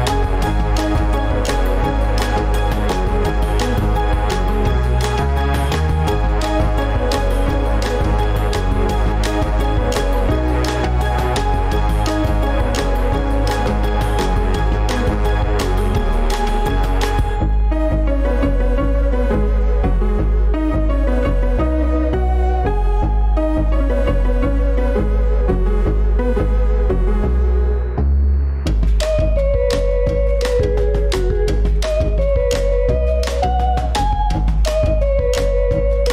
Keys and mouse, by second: 0.1 ctrl+s, 1.0-2.3 middle drag, 5.8 click, 8.1 ctrl+s, 9.7 click, 11.7 Tab, 14.9 ctrl+b, 20.1-21.4 middle drag, 33.5-36.1 drag.